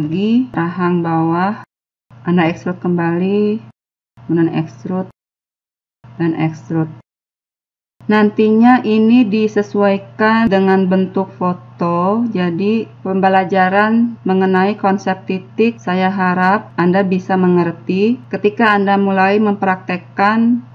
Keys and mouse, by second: 0.0-3.6 typing, 0.0 click, 0.8 click, 1.8 click, 2.5 click, 2.7 middle click, 4.4-7.1 middle drag, 6.9 KP_1, 7.1 click.